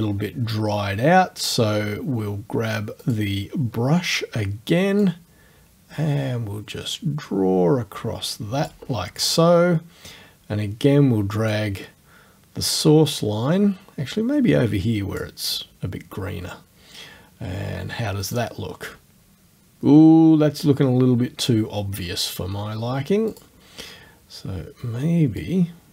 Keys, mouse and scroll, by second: 3.0 click, 5.0-8.9 drag, 11.5-15.4 drag, 18.2 click, 23.3 click, 25.4-25.9 drag.